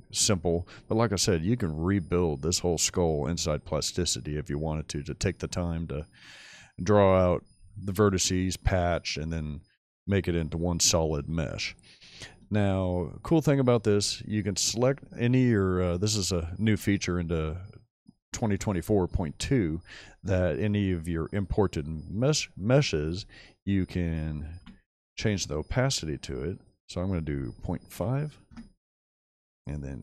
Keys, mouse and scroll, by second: 0.5 shift+middle drag, 0.9-1.7 shift+middle drag, 12.7-13.6 shift+middle drag, 24.5 m, 27.6 ., 28.0 5, 28.5 Return.